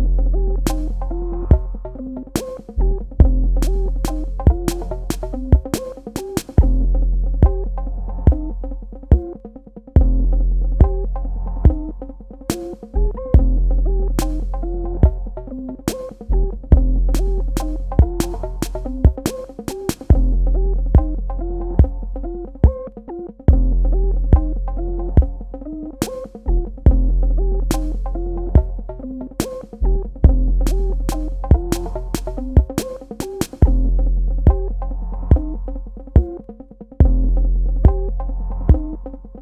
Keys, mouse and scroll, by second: 0.0 click, 4.6 space, 4.8 ctrl+alt+click, 8.6 ctrl+space, 8.9 ctrl+click, 9.3 ctrl+space, 9.5 click, 12.5 ctrl+click, 15.5 click, 20.5 click, 29.3 space, 29.7 click, 29.8 space, 30.8 click.